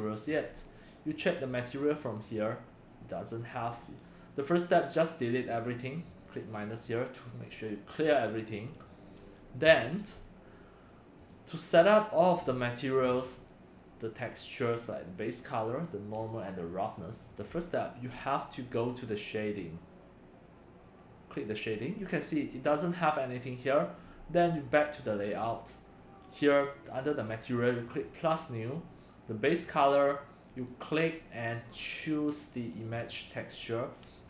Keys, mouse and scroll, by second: 0.0-2.2 drag, 2.2 scroll, 3.9-9.8 drag, 10.4-12.0 drag, 13.0 click, 13.2 click, 17.2 click, 22.1 drag, 23.8 drag, 24.9 click, 25.1-34.1 drag.